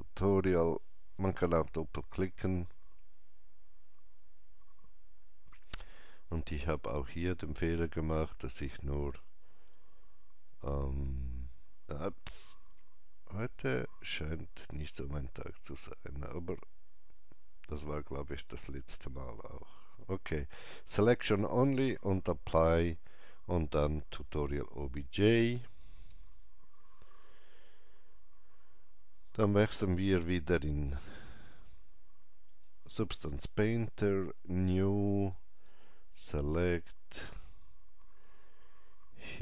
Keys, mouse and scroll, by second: 1.6 click, 6.8 click, 9.1 click, 11.0 click, 13.6 click, 18.3 click, 20.7 click, 24.0 click, 24.2 click, 29.2 click, 32.5 click, 33.9 click.